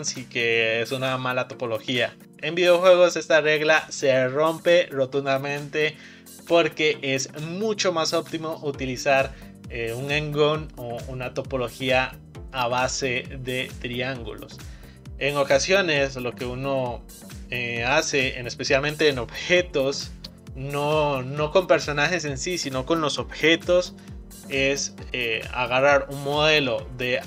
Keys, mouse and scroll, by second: 15.7-17.1 scroll down 3, 17.1-18.6 scroll down 1, 25.3-27.2 shift+middle drag.